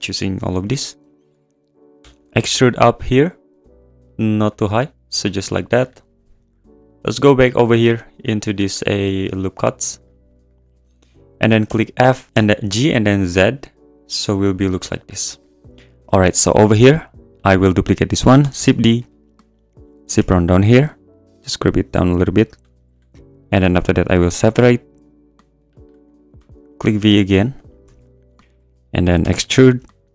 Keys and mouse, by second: 0.5 alt+click, 1.0 `, 2.0 e, 2.1 click, 2.2 g, 2.3 z, 4.5 click, 7.5 click, 8.2 click, 10.0 click, 10.5 alt+click, 11.7-12.4 typing, 14.6 click, 14.7 Tab, 15.2 `, 16.0 `, 18.5 shift+d, 18.8 `, 19.1 `, 20.2 g, 20.3 z, 22.4 click, 25.0 click, 26.3 p, 27.3 Tab, 27.6 click, 27.8 Tab, 28.4 `, 29.2 e, 29.3 click, 29.5 g, 29.6 z.